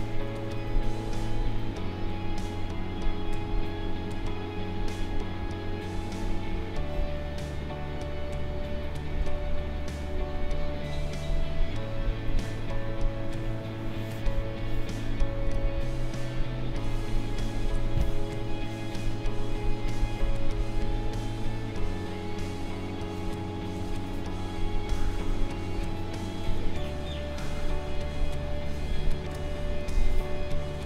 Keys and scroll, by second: 15.5 space, 23.7 ctrl+z, 26.4 ctrl+z, 29.3 space.